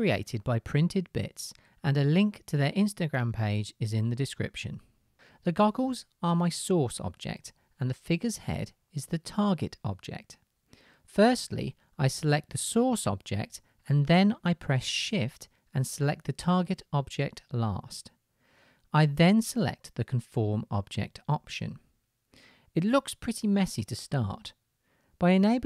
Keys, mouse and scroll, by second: 15.5-18.3 shift+drag, 20.3-21.4 drag, 21.4-21.9 middle drag, 22.0 click, 23.0 middle drag, 23.2-25.6 middle drag.